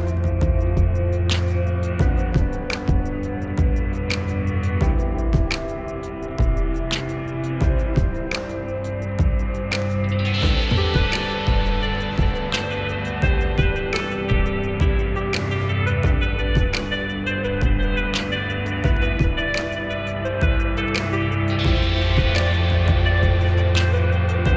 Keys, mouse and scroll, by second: 0.9 Tab, 1.6 scroll down 1, 2.3-2.9 scroll up 1, 6.9 click, 13.5-21.0 drag, 21.0-24.5 drag.